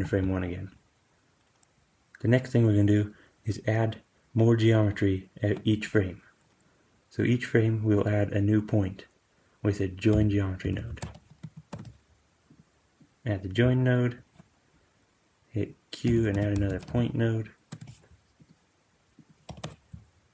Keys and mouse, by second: 10.0 q, 13.0-18.4 drag, 15.9 q, 19.0-20.3 drag.